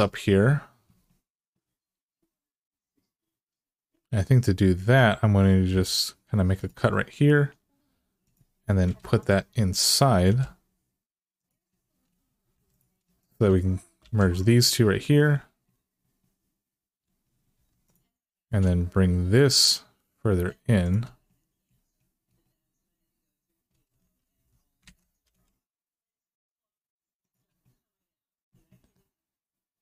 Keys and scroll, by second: 5.5 k, 8.7 Return, 10.0 g, 12.3 2, 13.8 f, 17.3-18.2 typing, 24.1 alt+z, 24.6 alt+z, 25.0 g.